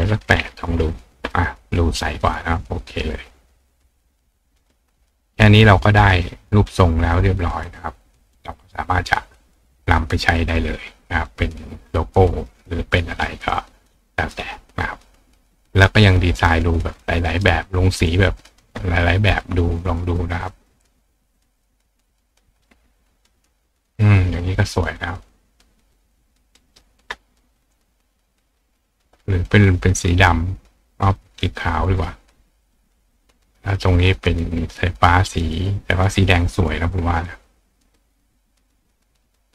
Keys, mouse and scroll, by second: 2.6 click, 3.2 click, 3.6-4.7 drag, 9.9 click, 13.4 click, 15.1 click, 15.5 click, 16.6 click, 17.3 right click, 17.8 click, 18.4 click, 19.8 click, 20.7 click, 21.6 click, 22.2 click, 23.3 click, 23.8 click, 24.6 click, 25.7-26.8 drag, 26.6 right click, 27.9 click, 28.4 click, 29.5 click, 31.5 click, 32.7 click, 35.7 click, 36.5 click, 37.9 click.